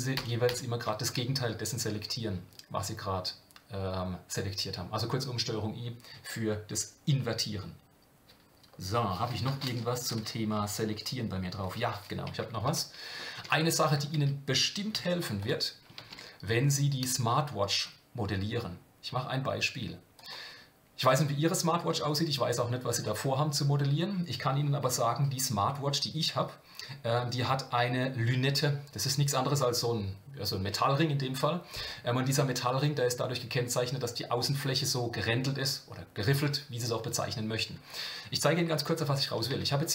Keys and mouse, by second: 12.6 Tab, 13.4 s, 14.9 x, 16.0 shift+a, 39.0 KP_1, 39.5 KP_7.